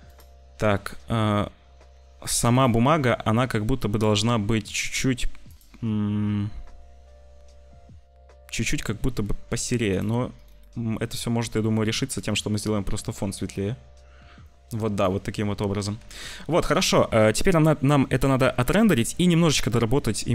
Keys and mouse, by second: 2.3 click, 10.5 click, 11.3 click, 12.2-15.0 shift+drag, 15.9 z, 16.6 ctrl+s.